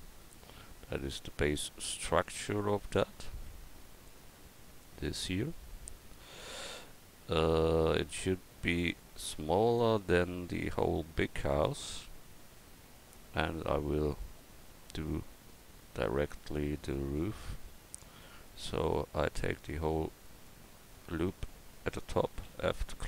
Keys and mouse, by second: 3.5 Tab, 17.2 Tab, 22.4 f.